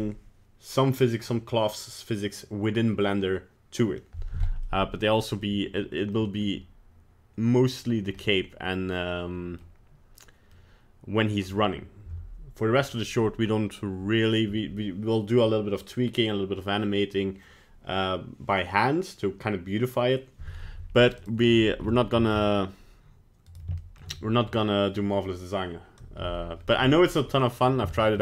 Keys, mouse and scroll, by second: 4.7 middle click, 6.1 middle click, 8.2 middle click, 8.9 middle click, 10.7 middle click, 21.2 right click, 21.9 shift+middle click, 22.1 shift+middle click, 22.3 scroll up 6, 23.5 right click, 23.8 shift+middle click, 24.2 middle click, 26.2 KP_Decimal, 26.8-27.7 scroll down 5, 27.2 middle click, 27.9 shift+middle click.